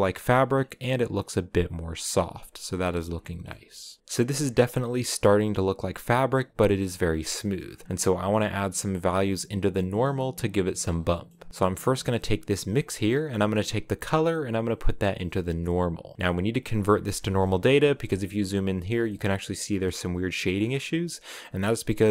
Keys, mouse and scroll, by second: 0.3-1.0 scroll up 2, 2.4 scroll down 5, 3.0 shift+middle click, 3.2 scroll down 1, 3.8 scroll down 1, 4.0 click, 4.3-9.7 shift+middle drag, 9.7 click, 13.1-15.3 drag, 16.6 shift+middle click, 16.9 scroll up 5, 17.2 shift+middle click, 17.5-18.6 scroll up 3, 17.7 shift+middle click, 18.6 middle click, 18.8 scroll up 1, 18.8-22.1 shift+middle drag.